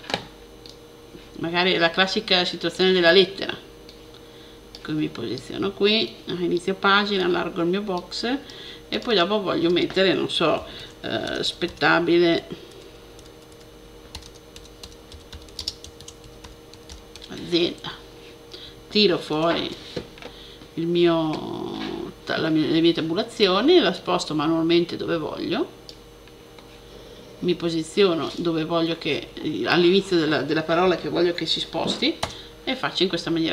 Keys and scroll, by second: 10.4-17.7 typing, 19.2 shift+super+t.